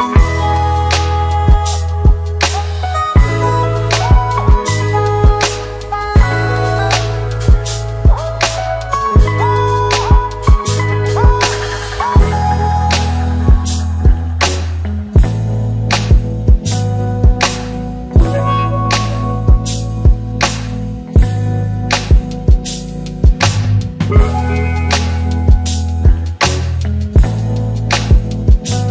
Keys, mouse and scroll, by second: 13.2-14.6 typing, 16.2 click, 17.4 click, 20.4 click, 22.4 click, 25.3 click, 28.5 click.